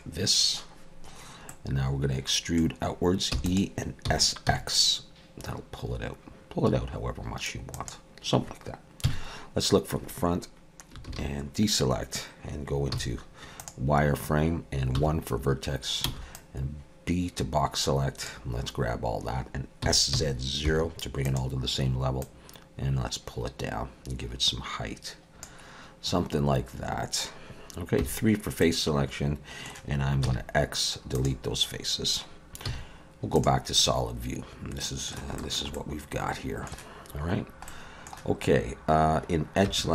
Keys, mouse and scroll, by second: 1.5 middle click, 3.3 e, 4.0 s, 9.0 KP_1, 11.1 alt+a, 12.9 z, 14.9 1, 16.0 b, 19.9 s, 22.2 click, 28.0 3, 28.6 middle click, 30.2 x, 32.7 z, 33.8 middle click, 35.4 shift+middle click, 35.7 middle click, 37.7 middle click, 38.1 shift+middle click, 39.7 2.